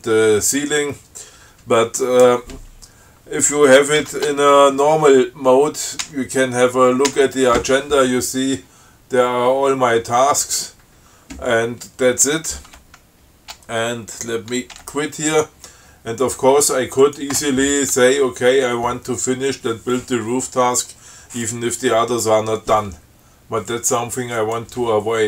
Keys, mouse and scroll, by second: 4.3 ctrl+c, 6.3 a, 7.4 a, 15.1 q, 17.3 click, 24.7 click.